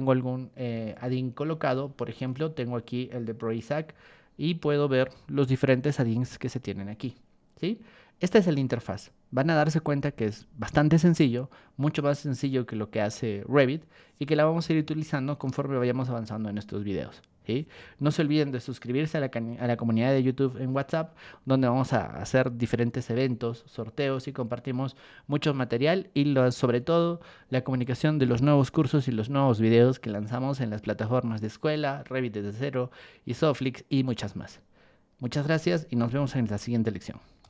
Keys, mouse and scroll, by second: 0.9 click, 1.7 ctrl+1, 2.1 click, 2.8 ctrl+click, 3.9 Escape, 37.4 click.